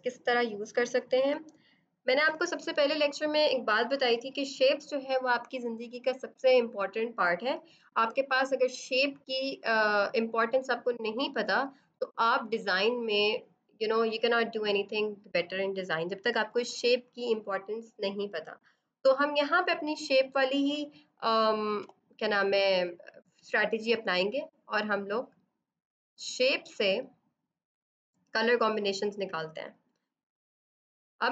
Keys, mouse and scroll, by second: 21.7 b, 23.7 right click, 24.5 click, 28.9 click.